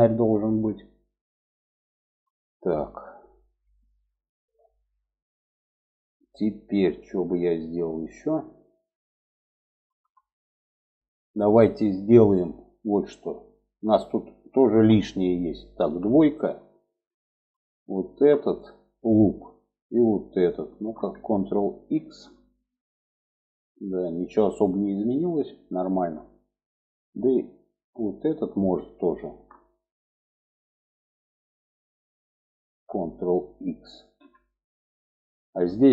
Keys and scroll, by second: 15.2 2, 21.2 ctrl+x, 33.2 ctrl+x.